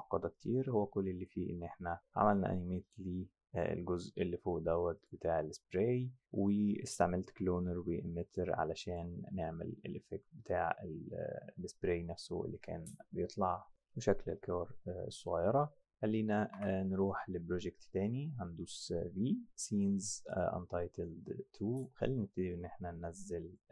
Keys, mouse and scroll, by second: 1.2 click, 2.8 click, 5.0 click, 8.3 click, 8.9 click, 16.5 b, 20.3 click, 23.5 click.